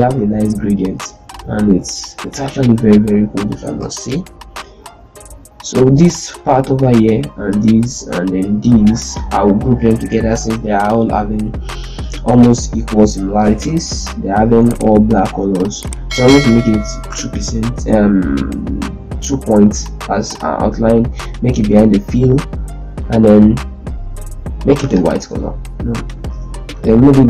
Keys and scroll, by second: 3.6 ctrl+space, 9.4 ctrl+g, 10.0 F12, 17.0 2, 26.6 F12.